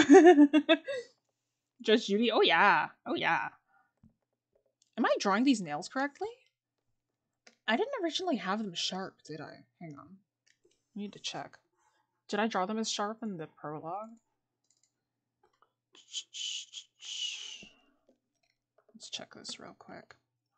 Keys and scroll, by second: 3.2-4.0 scroll up 1, 4.0-4.4 scroll down 1, 8.3 scroll down 1, 9.9-10.8 scroll, 18.8-19.3 scroll up 1, 19.3 scroll.